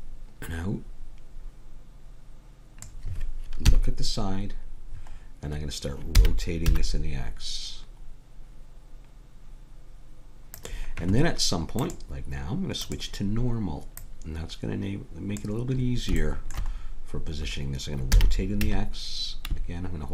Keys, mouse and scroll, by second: 3.7 KP_3, 6.2 r, 11.8-15.9 drag, 15.8 middle click, 18.1 r.